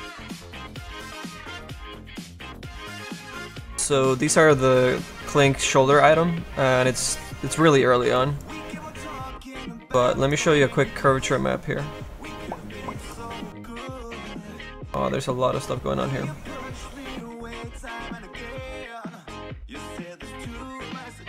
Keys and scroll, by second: 10.5 F1.